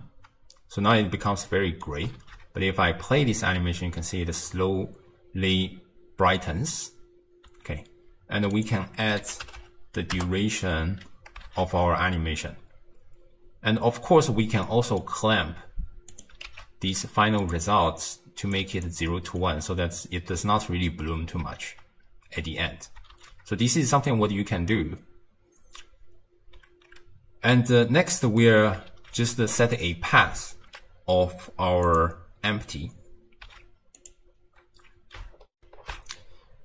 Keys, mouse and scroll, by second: 1.5-2.2 middle drag, 2.2 shift+space, 3.1 space, 7.5 space, 8.5-9.6 drag, 9.6 0, 11.5 shift+space, 14.1 space, 14.6 middle click, 15.2-16.1 scroll down 6, 16.1 click, 16.5 shift+d, 17.7-18.4 scroll up 5, 18.4 click, 19.1-22.2 middle drag, 23.2 shift+space, 27.7-28.9 middle drag, 28.9 shift+space, 31.9 click, 33.4 z, 35.5 ctrl+alt+shift+w.